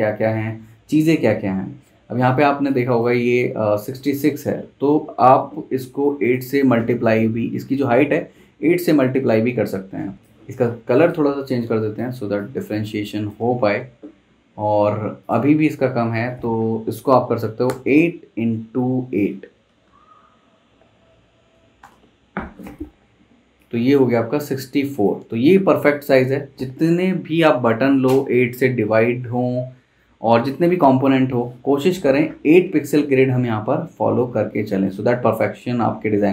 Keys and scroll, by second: 3.3 super+z, 6.5 super+z, 10.3 super+z, 17.7 8, 19.7 *, 21.4 8, 21.8 Return.